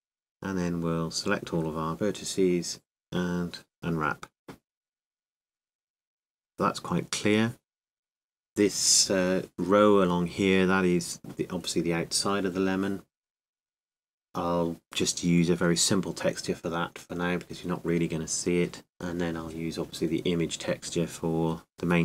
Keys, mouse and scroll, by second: 0.0-2.3 drag, 2.3 a, 2.7 a, 6.2 click, 18.9 b, 18.9 a.